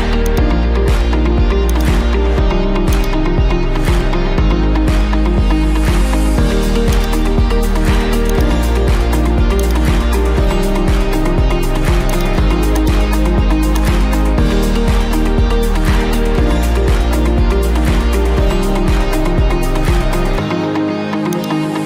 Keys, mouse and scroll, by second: 0.4 click, 1.8-4.2 drag, 4.4 5, 4.9 Return, 7.0-8.1 drag, 8.4-9.5 drag, 12.1 click, 12.8 click, 13.8 click, 19.2-19.6 scroll, 20.8 middle click, 21.4 click.